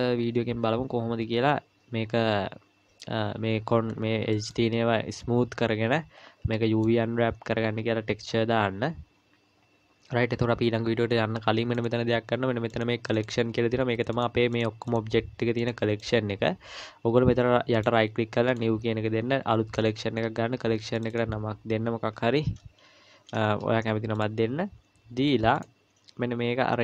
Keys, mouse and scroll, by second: 0.2-1.7 scroll up 1, 3.9-4.3 scroll up 4, 4.3 middle click, 5.9-6.5 scroll down 4, 6.5 middle click, 11.7 click, 12.7 click, 17.8 right click, 21.0 click, 21.1 click, 25.5 click.